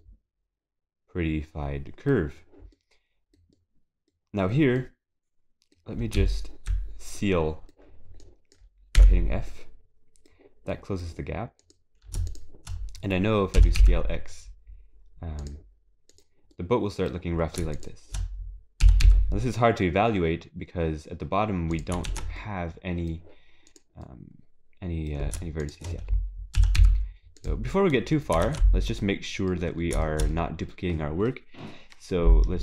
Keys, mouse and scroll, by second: 0.0 middle click, 2.3 scroll up 4, 3.5 middle click, 4.8 middle click, 4.8 scroll up 1, 6.2 z, 7.2 middle click, 8.2 click, 9.1 s, 10.7 middle click, 10.8 middle click, 11.6 middle click, 11.8 click, 12.3 shift+click, 13.6 s, 16.5 click, 16.6 middle click, 17.7 shift+click, 18.8 s, 22.1 ctrl+s, 22.4 middle click, 24.8 click, 25.6 shift+click, 26.6 s, 27.7 scroll down 3, 27.9 middle click, 28.5 ctrl+s, 28.8 scroll down 2, 29.0 middle click, 30.0 shift+middle click, 30.3 middle click.